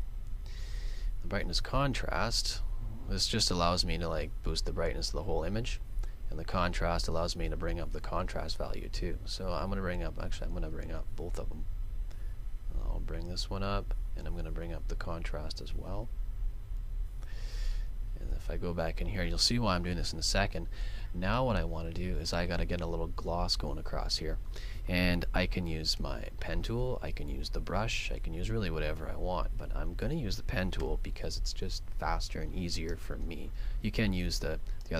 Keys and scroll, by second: 5.5 super+z, 8.4 super+z.